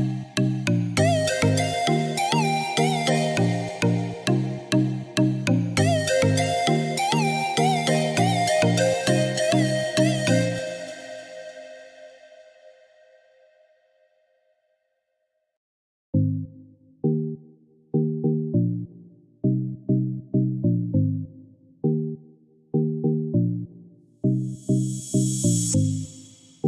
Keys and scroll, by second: 23.0 Escape, 24.9 Return.